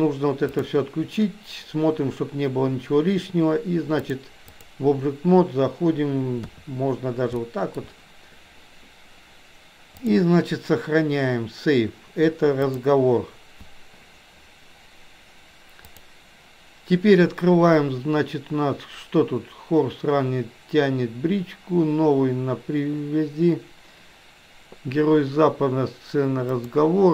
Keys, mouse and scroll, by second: 0.6 click, 4.1 click, 6.4 KP_3, 7.4 middle drag, 9.9-13.4 drag, 15.9-27.1 drag.